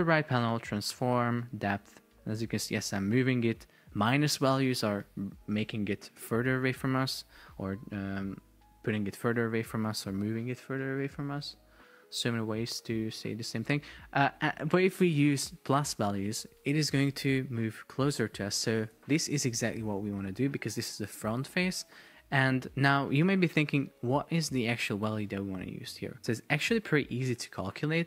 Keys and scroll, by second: 19.0 shift+super+4, 19.7 Escape, 23.6 shift+Up, 25.2 shift+Down, 25.9 shift+Up.